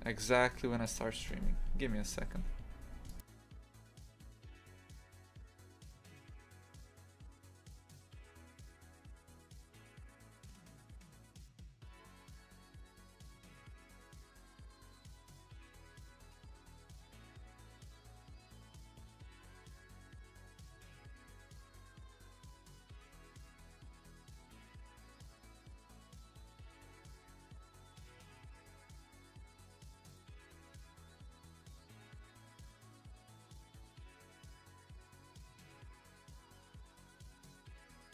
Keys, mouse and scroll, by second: 9.7 click, 10.0 1, 10.6 right click, 12.1 g, 14.6 ctrl+r, 22.3 g, 25.4 1, 25.5 right click, 26.2 g, 28.3 ctrl+r, 29.4 1, 29.5 right click, 30.1 g, 33.9-35.0 shift+middle drag, 35.0 2, 35.2 right click, 37.3-38.1 shift+middle drag.